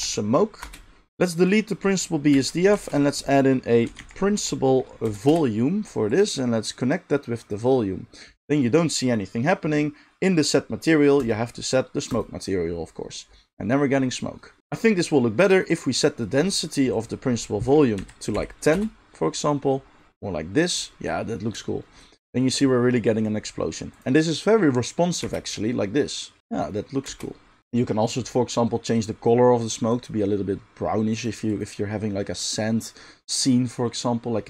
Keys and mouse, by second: 1.1 middle click, 1.1 a, 1.1 KP_Decimal, 1.3 click, 1.4-6.7 middle drag, 2.3 x, 2.8 shift+a, 6.7-27.6 drag, 25.2 space, 27.0 space, 27.6-31.3 middle drag, 31.3-32.5 drag, 32.5-34.4 middle drag.